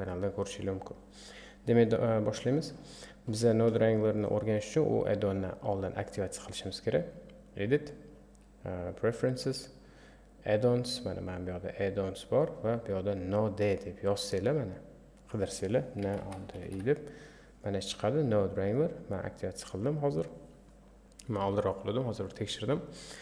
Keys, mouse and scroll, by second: 9.0-14.6 drag.